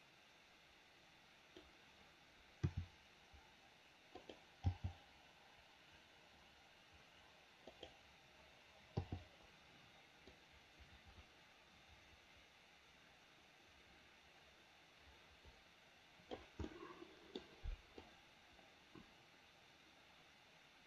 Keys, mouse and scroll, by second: 2.7 r, 4.6 g, 9.0 i, 10.3-16.5 drag, 16.7 middle click, 18.1-20.8 drag.